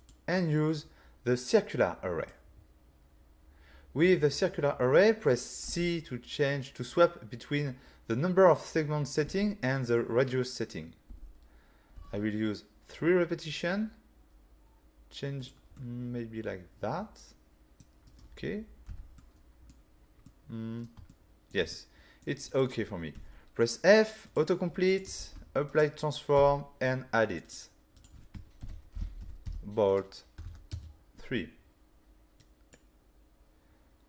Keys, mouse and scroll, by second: 0.0 click, 0.4 click, 5.7 c, 15.4 click, 15.7 middle click, 18.1 right click, 18.9 <, 19.2 middle click, 19.9-20.2 scroll down 2, 20.2 middle click, 21.1 ctrl+middle click, 21.7 middle click, 22.5 click, 23.2 f, 24.3 click, 24.9 click, 25.2 ctrl+a, 25.7 click, 26.4 n, 27.5 click, 28.0 click, 28.6-30.8 typing, 32.4 click.